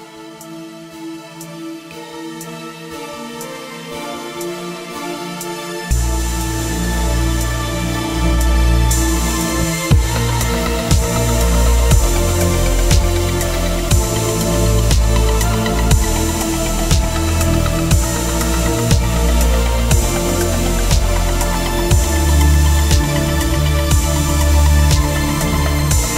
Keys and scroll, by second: 0.0-9.3 typing, 8.8 ctrl+Return, 9.4 Right, 10.8 ctrl+t, 14.1 Return, 15.9 F9, 19.0-22.2 typing, 22.9 Return.